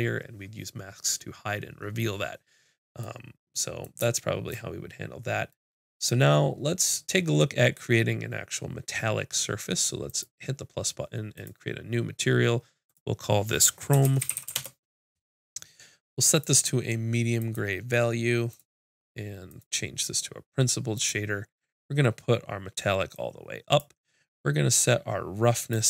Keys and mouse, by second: 3.9-5.2 drag, 5.2 right click, 5.5 click, 6.0 middle click, 6.6-10.0 drag, 10.2-11.4 drag, 11.4 right click, 11.6-16.2 drag, 16.3-18.3 drag, 18.6-21.2 drag, 23.2-25.8 drag.